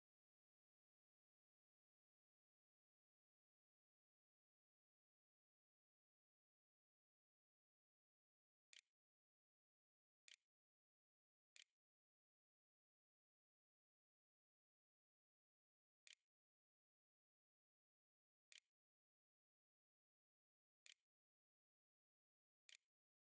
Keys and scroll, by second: 7.5-8.6 typing, 10.5 ctrl+space, 11.0 ctrl+v, 11.6-12.4 typing, 15.1 Tab, 15.4 w, 15.7 e, 17.6 q, 18.0 Tab, 22.2 ctrl+s, 23.0 a.